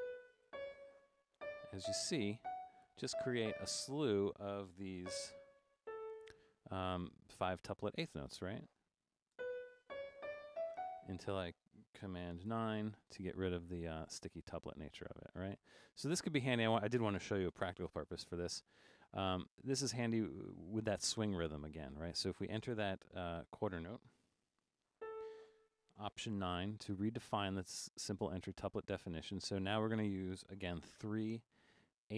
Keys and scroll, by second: 0.0-3.4 typing, 5.0-6.3 typing, 9.2-11.2 typing, 12.5 super+9, 17.6 5, 19.2 Down, 19.4 Down, 20.9 Down, 21.6 Down, 21.8 Down, 23.4 5, 25.0 a, 26.3 alt+9, 30.8 3.